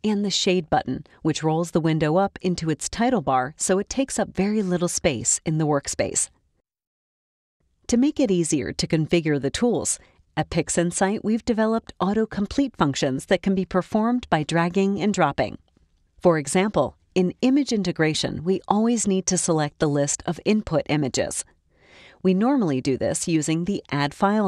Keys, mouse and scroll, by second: 0.9 click, 2.6-24.4 drag, 24.1 middle click.